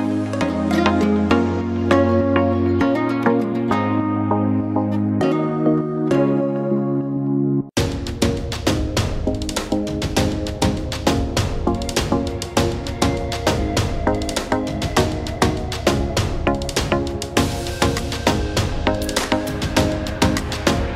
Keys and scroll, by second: 9.1 ctrl+0, 12.4 ctrl+z.